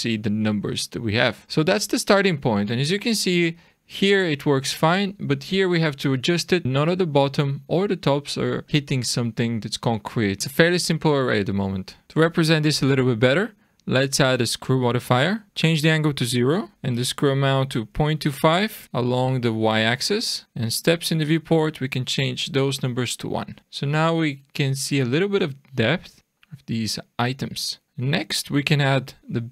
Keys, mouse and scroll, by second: 0.2 shift+middle click, 0.2-1.1 scroll down 1, 1.4-1.9 shift+scroll down 1, 1.9-2.4 scroll up 2, 2.7 middle click, 8.6-10.4 scroll down 2, 14.6 click, 17.1 click, 19.6 click, 20.4 click, 23.6 shift+middle click, 23.6-24.9 scroll up 3, 26.3 click, 27.8 middle click, 27.8-28.3 scroll down 2.